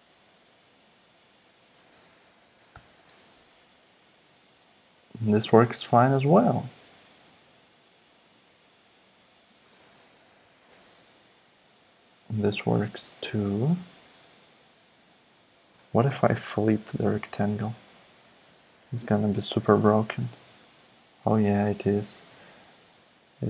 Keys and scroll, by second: 2.7 alt+super+p, 3.4 alt+super+p, 6.2 super+z, 10.4 alt+super+p, 13.3 super+z, 16.2 shift+h, 19.0 alt+Left, 19.8 alt+super+p.